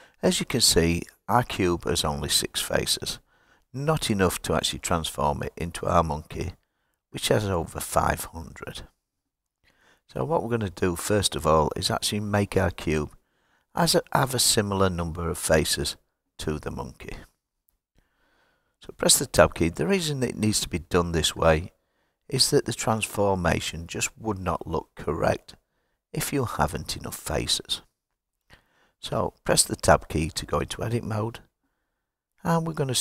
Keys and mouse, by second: 4.7 click, 12.2 click, 13.0 click, 13.8 click, 14.9 click, 15.6 click, 17.5 click, 29.6 Tab, 31.5-33.0 right drag.